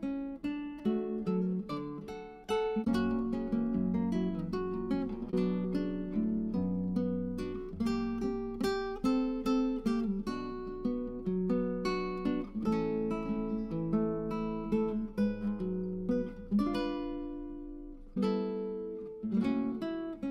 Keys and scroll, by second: 12.4 Tab.